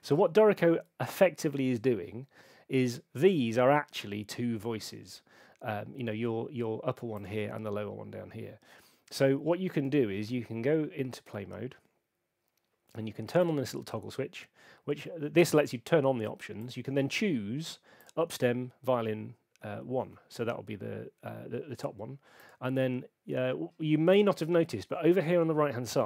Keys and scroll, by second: 1.6 super+2.